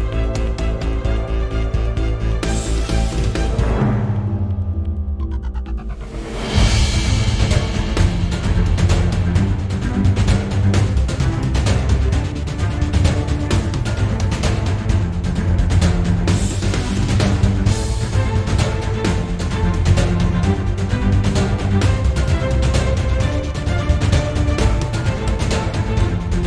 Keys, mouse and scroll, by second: 0.3-1.2 scroll down 2, 1.2 scroll down 1, 1.5 ctrl+z, 3.1 g, 4.0 Escape, 4.4 o.